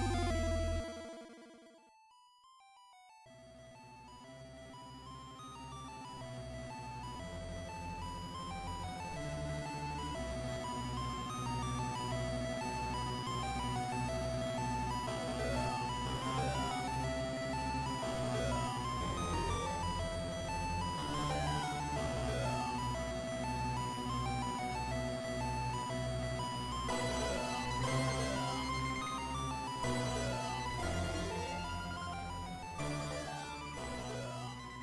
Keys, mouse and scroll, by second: 28.9 ctrl+Up, 34.4 ctrl+s.